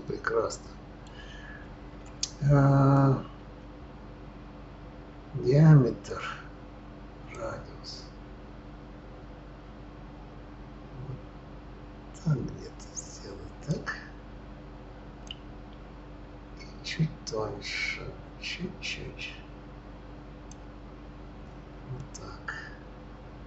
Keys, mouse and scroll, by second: 7.3-10.3 drag, 15.2-18.2 drag, 22.0-23.4 middle drag.